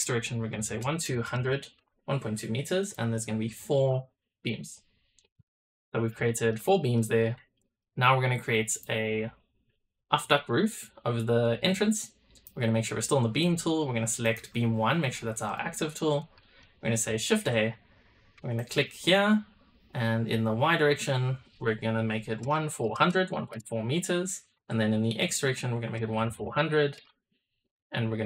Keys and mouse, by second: 1.2 KP_0, 2.7-3.7 drag, 4.2 click, 5.4 click, 6.2 shift+middle drag, 6.6 middle drag, 7.5 shift+middle click, 9.3-12.3 drag, 13.4-15.5 drag, 16.3 click, 17.2 shift+a.